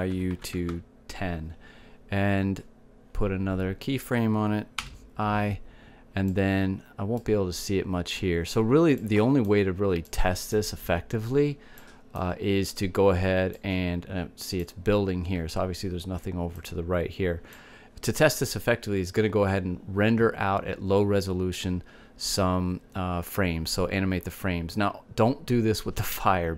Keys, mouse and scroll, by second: 5.6 i, 7.1 middle click, 15.5 click, 17.5-19.3 drag.